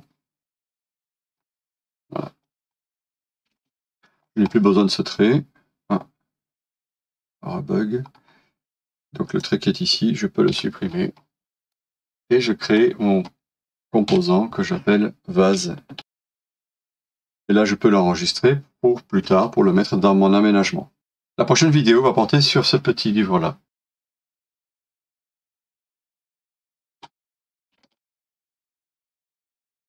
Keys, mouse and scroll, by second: 1.0 scroll up 1, 1.2 scroll down 1, 1.3 scroll up 1, 2.0 middle click, 2.7 scroll down 1, 3.5 space, 4.0 middle click, 4.1 scroll up 1, 4.5 middle click, 8.1 scroll up 1, 10.5-10.8 scroll up 1, 10.8 Delete, 10.9 scroll down 1, 11.6 middle click, 14.1 typing, 15.8-17.0 typing, 17.2 middle click.